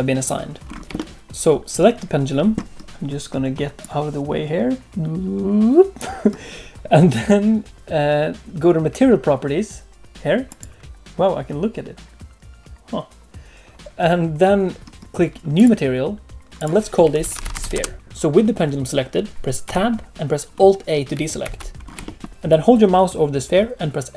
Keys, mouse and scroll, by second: 0.6-0.9 scroll up 3, 0.9 shift+middle click, 1.2 click, 1.2 shift+middle click, 1.2 scroll down 1, 10.4 click, 15.5 click, 16.5 click, 19.6 Tab, 20.1 shift+middle click, 20.1 scroll down 3, 20.5-21.1 scroll up 1, 21.1-21.4 scroll up 1, 21.4 alt+a, 21.7 scroll up 1, 22.0 shift+middle click.